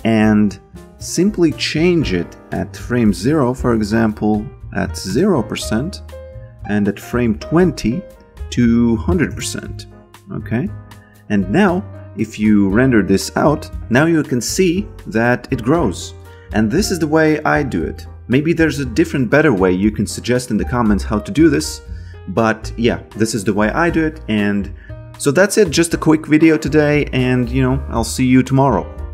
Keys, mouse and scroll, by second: 2.5 click, 4.9 0, 5.1 Return, 6.0 click, 9.0 0, 9.3 Return, 10.2 click.